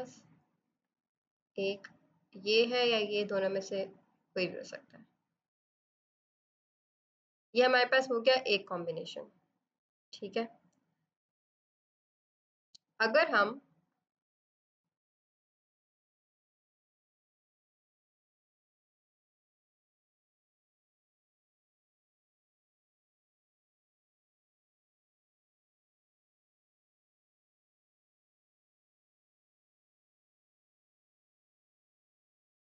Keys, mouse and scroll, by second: 2.3 click, 4.0 click, 10.2 click, 13.5 click, 14.0 right click, 15.0 click, 16.1 right click, 16.7 click, 22.2 v, 23.4 click, 24.6 click, 24.9 z, 25.1 click, 25.8 Return, 26.3 ctrl+d, 26.5-27.3 typing, 27.0 alt+click, 27.1 click, 27.4 click, 27.7 click, 29.6 click, 30.0 v, 30.1 click, 30.5 click, 31.4 ctrl+d, 31.5 click, 31.9 b, 32.0 alt+click, 32.2 click, 32.6 click.